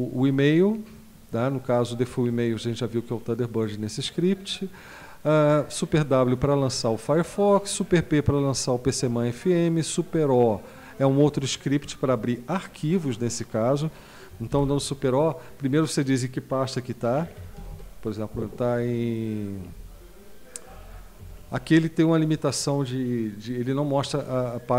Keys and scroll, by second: 14.5 super+o, 17.0-18.2 typing, 20.6 Down, 20.8 Down, 21.2 Up, 21.4 Up.